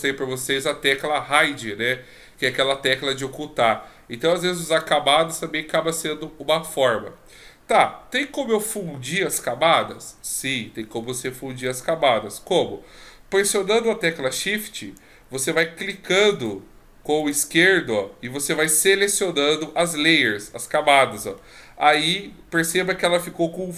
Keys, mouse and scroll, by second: 16.3 shift+right click, 17.2 shift+click, 18.7 shift+click.